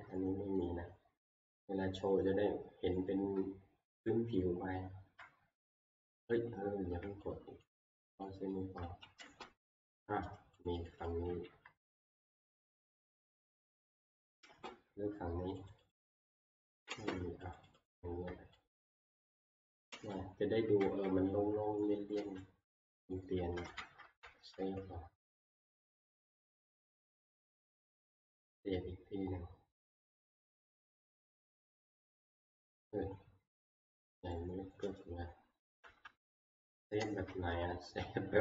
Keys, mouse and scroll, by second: 0.6 middle click, 1.3-2.2 scroll, 3.0 scroll, 3.1 middle click, 3.9 shift+middle click, 4.4 middle click, 4.9 middle click, 5.1 middle click, 6.3-8.6 shift+click, 7.5 shift+click, 8.5 click, 9.5 click, 12.3 shift+click, 12.8 click, 13.2 shift+click, 19.1 shift+click, 19.5-20.8 typing, 19.6 shift+click, 20.2 middle click, 20.3 middle click, 21.5 middle click, 22.0 middle click, 22.0 shift+middle click, 22.1 shift+middle click, 23.1 click, 24.0 c, 24.3 ctrl+s, 26.4 alt+Tab, 28.0 c, 28.2 right click, 30.3 click, 32.7-34.7 scroll, 34.7-35.3 shift+scroll, 34.8 x, 35.6 click, 36.0 click, 36.0 Tab, 37.5 s, 37.7 shift+middle click.